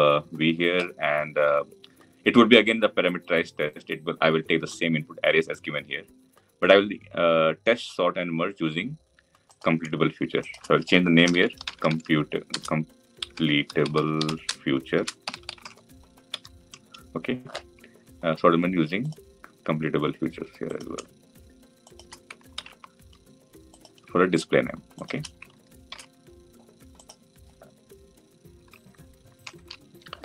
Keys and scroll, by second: 22.3 ctrl+c, 25.6 ctrl+v.